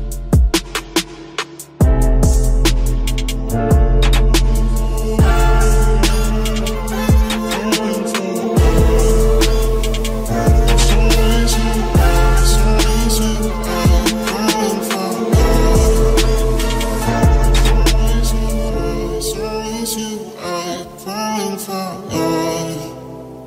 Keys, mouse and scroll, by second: 2.3 s, 4.1 Tab, 4.6 ctrl+s, 5.0 z, 5.8 Tab, 8.0 middle click, 8.2 middle click, 8.8-9.8 drag, 9.0 c, 9.8 right click, 18.1 middle click, 18.3 z, 19.1 right click, 19.6-20.7 middle drag, 20.9 c.